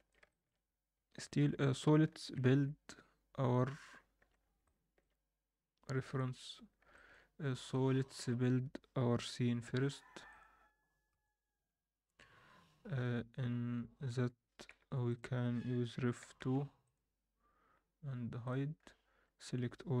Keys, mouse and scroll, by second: 0.2 alt+shift+middle drag, 0.6-1.0 scroll down 2, 1.4 KP_1, 2.5 a, 4.2 alt+a, 4.3 scroll down 1, 4.6-5.0 middle drag, 6.1 KP_7, 6.7 scroll down 2, 6.9 shift+middle click, 7.6 click, 8.1 shift+click, 9.2 m, 13.4-14.7 scroll down 1, 14.7 m, 17.7-18.4 scroll down 1, 18.4 click, 18.7-19.1 scroll up 1, 19.1 a.